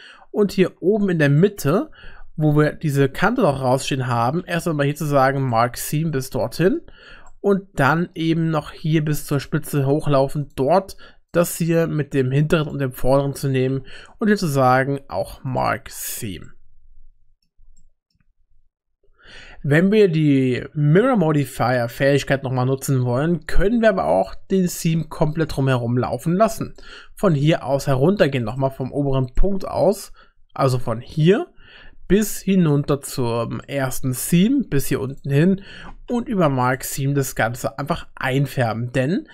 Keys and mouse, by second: 1.4-2.5 shift+middle drag, 4.4 u, 6.0 middle click, 7.3 shift+middle click, 8.8 2, 9.3 click, 9.9 click, 10.4 click, 11.3 shift+click, 13.7 u, 16.5 middle click, 17.8 shift+click, 24.2 middle click, 27.3 middle click, 28.5 shift+middle click, 29.3 middle click, 32.2 shift+middle click, 33.1 middle click, 33.6 shift+middle click, 36.1 u.